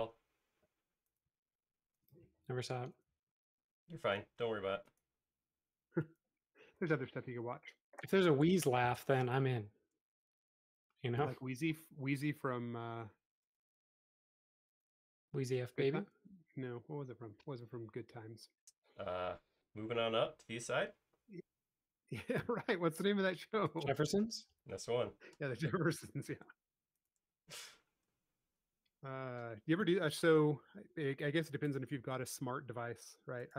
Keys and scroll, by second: 17.5 super+s, 22.4 space.